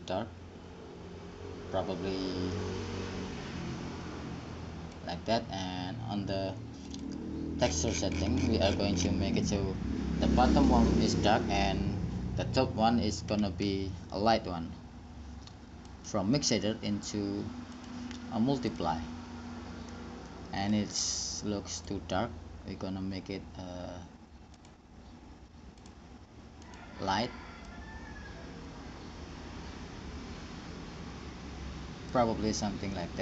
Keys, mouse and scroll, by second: 7.1-9.0 drag, 16.1-19.9 drag, 19.9 middle click, 22.0-24.5 drag, 24.8-29.1 drag, 33.1-33.2 middle drag.